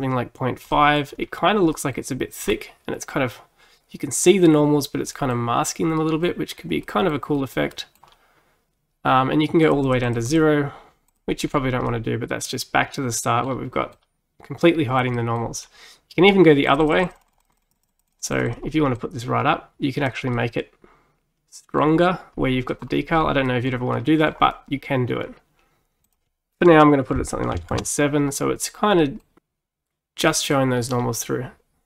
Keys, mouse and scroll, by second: 1.2 scroll up 2, 1.8 middle click, 2.5 scroll down 4, 5.2-8.2 middle drag, 8.1-9.3 scroll up 3, 9.3-9.7 scroll up 1, 9.7-11.5 drag, 11.5-11.9 scroll down 4, 11.9-15.6 middle drag, 15.6-16.3 scroll up 3, 16.7-20.4 drag, 20.4-22.8 middle drag, 22.8-23.5 scroll down 5, 23.5 middle click, 24.4-25.4 scroll up 4, 25.4-26.1 scroll up 1, 26.1-29.0 drag, 29.0 middle click, 29.4-30.3 scroll down 2, 30.3 middle click, 31.0-31.8 scroll up 2.